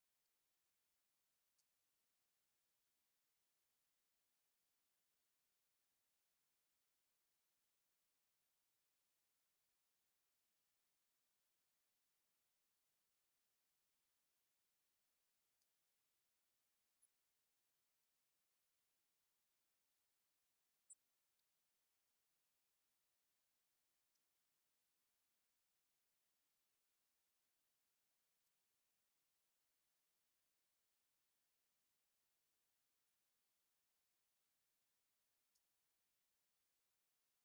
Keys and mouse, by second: 4.2 click, 10.7 click, 15.1 right click, 16.4 right click, 17.3-37.4 drag.